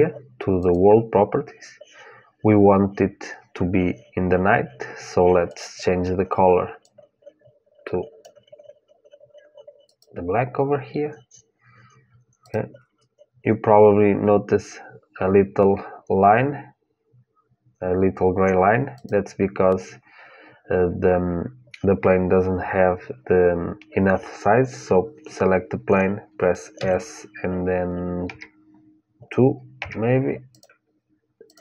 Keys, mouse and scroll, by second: 0.3-2.3 drag, 5.2-7.2 drag, 9.6-11.6 drag, 12.2-14.2 drag, 18.7-20.7 drag, 26.6 s, 30.3-31.6 drag.